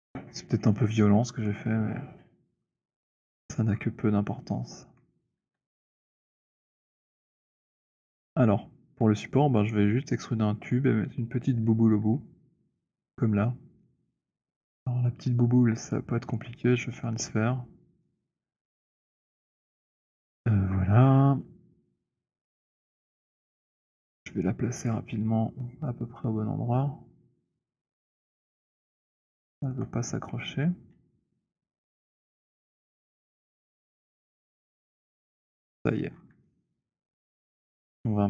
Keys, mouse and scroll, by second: 3.1-4.0 scroll, 5.0 alt+click, 5.2 w, 5.8 scroll, 6.8 alt+click, 7.7 click, 14.3 click, 15.8 click, 17.9 click, 20.4 shift+right click, 23.8 click, 25.0-28.4 v, 27.1 v, 28.6 click, 28.6 v, 29.7 alt+click, 30.8-34.5 typing, 33.8 click, 35.3-36.1 scroll, 36.9 alt+click, 37.6 alt+right click, 38.1 alt+click, 38.1 t.